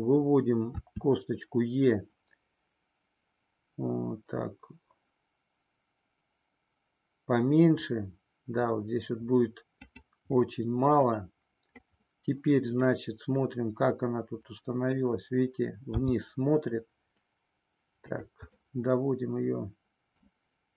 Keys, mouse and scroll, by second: 0.7 e, 9.8 click, 13.0-14.9 middle drag, 15.9 g, 18.0 click, 18.5-20.3 middle drag.